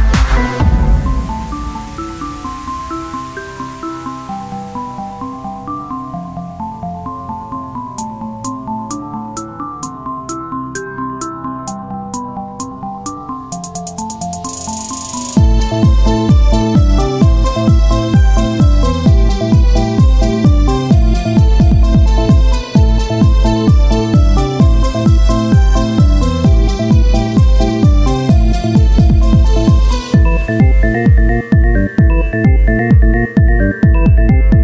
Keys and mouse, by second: 2.9 Tab, 4.7 ctrl+r, 5.8 ctrl+z, 6.2 a, 7.1 w, 9.6 ctrl+Tab, 11.0 ctrl+r, 19.2-20.9 drag, 20.9 z, 21.2 c, 23.1 z, 23.4-24.6 drag, 25.3 right click, 26.2 KP_3, 26.5 z, 26.8 c, 28.1-32.7 drag, 29.6 z, 33.2-34.2 drag, 34.2-34.6 z.